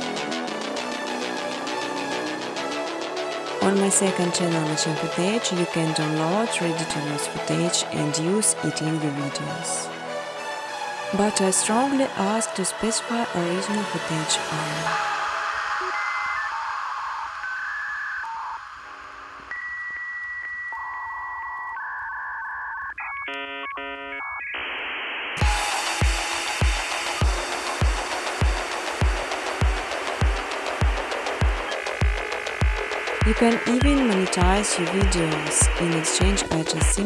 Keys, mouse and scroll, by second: 0.0-1.3 typing, 2.8 click, 3.0 ctrl+c, 3.6 click, 5.0 click, 7.1 click, 8.7 click, 8.8 ctrl+v, 9.5 click, 9.7 click, 16.1 click, 17.1 0, 17.6 click, 19.7 click, 21.9-24.8 typing, 22.1 click, 24.5 Return, 27.1 typing, 28.4 click, 28.4-29.1 typing, 29.2 ctrl+v, 32.2 click, 33.3-35.8 typing.